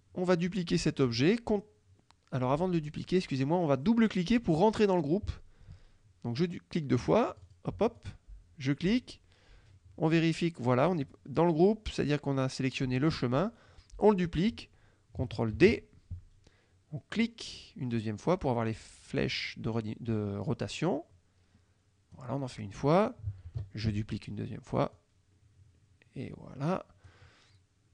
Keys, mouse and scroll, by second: 7.4 click, 8.0 click, 15.7 ctrl+d, 17.2 click, 18.9-22.4 drag, 23.5 ctrl+d, 25.0-27.3 drag.